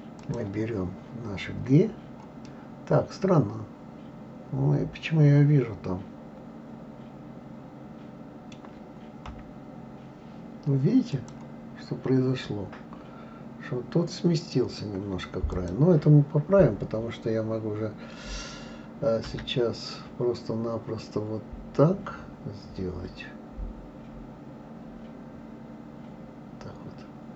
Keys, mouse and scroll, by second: 0.2 click, 2.4-5.6 middle drag, 9.3 KP_3, 11.1 click, 15.5 click.